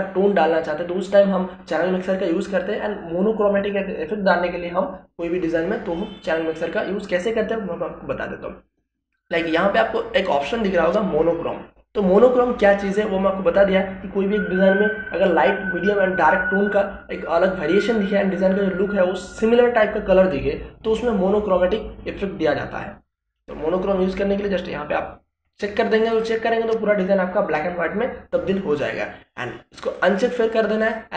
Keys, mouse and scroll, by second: 23.7 click, 29.2-31.1 drag.